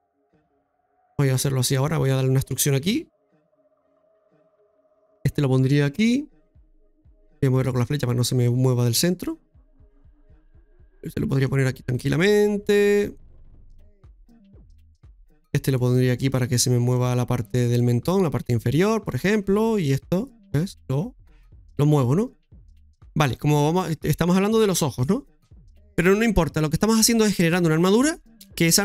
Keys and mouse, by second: 0.3 click, 2.0 right click, 4.8 e, 5.0 Return, 5.0 ctrl+z, 7.3 click, 8.4 click, 10.0 click, 11.4-13.1 drag, 13.6 right click, 13.6-14.4 typing, 15.0 click, 15.5-16.3 typing, 16.9 click, 18.8 click, 19.6-21.8 typing, 19.8 right click, 20.7 click, 22.5 click.